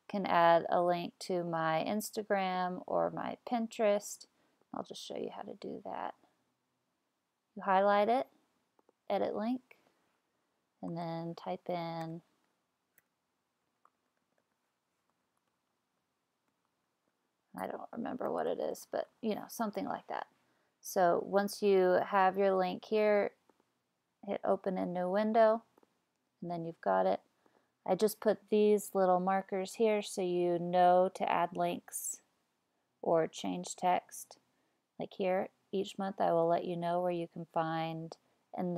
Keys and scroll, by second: 10.6-19.7 typing, 29.8 BackSpace, 31.2 BackSpace.